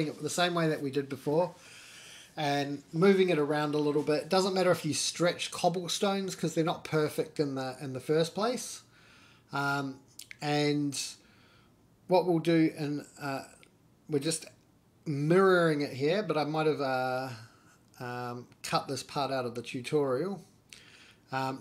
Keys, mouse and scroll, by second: 0.3 1, 0.7 click, 1.3 middle click, 1.9 g, 3.6 middle click, 4.0-4.7 scroll down 2, 4.4 middle click, 4.9 Tab, 5.2 click, 5.5 middle click, 6.1 shift+middle drag, 7.1 middle click, 8.4 shift+s, 11.1 Tab, 11.9 right click, 13.5-15.6 drag, 16.3 scroll up 1, 16.5-17.9 middle drag, 17.9 click, 18.1-18.8 middle drag, 18.8 click, 18.9 middle click, 19.2-21.6 drag.